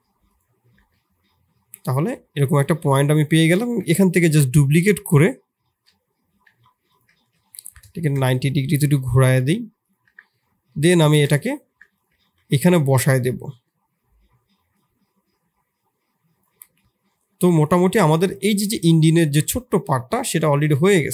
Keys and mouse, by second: 0.7 Tab, 0.8-1.5 middle drag, 3.6 KP_7, 6.3 shift+d, 7.1 r, 8.9 middle click, 9.8 click, 10.0 Tab, 10.6 middle click, 11.0 shift+s, 11.6 Tab, 12.1 shift+s, 12.6 middle click, 13.6 middle click, 15.1-16.6 drag, 16.6-17.0 middle drag, 17.2 s, 18.2 click, 18.7-19.4 middle drag.